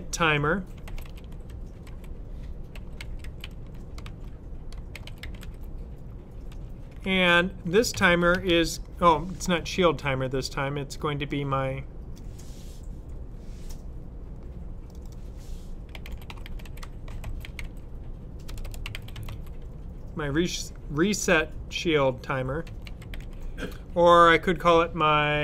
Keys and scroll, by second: 0.4-6.4 typing, 7.6-8.6 typing, 15.6-19.7 typing, 22.3-23.6 typing.